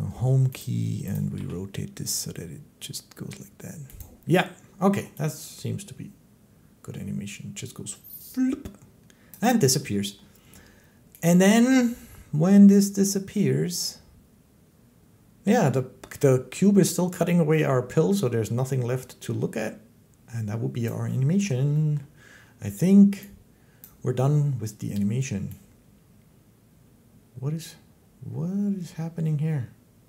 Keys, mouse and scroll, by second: 0.4 click, 1.0 click, 1.3 g, 3.8 click, 9.1 click, 20.7 click, 21.8 middle click, 23.6 click.